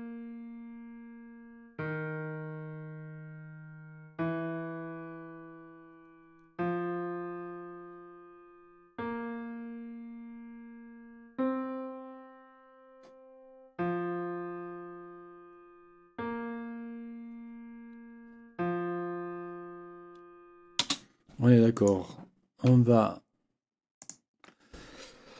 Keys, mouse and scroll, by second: 20.8 space, 21.7 click, 24.0 shift+click.